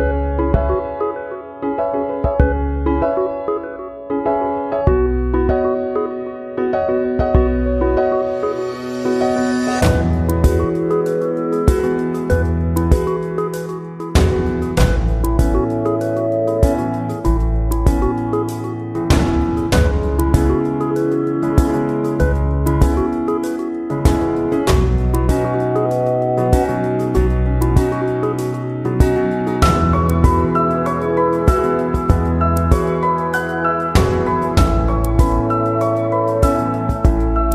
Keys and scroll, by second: 5.9 ctrl+z.